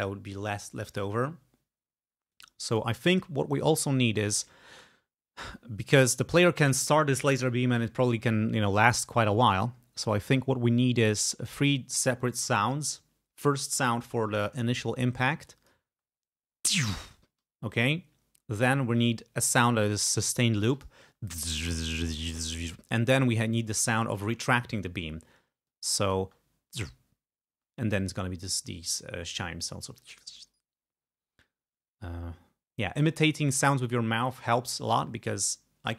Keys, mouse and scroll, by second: 2.4 click, 4.7 space, 6.1 space, 15.3 click, 15.9 space, 17.4 space, 18.6-21.1 drag, 21.3 space, 22.9 space, 25.7 click, 26.3 space, 27.6 space.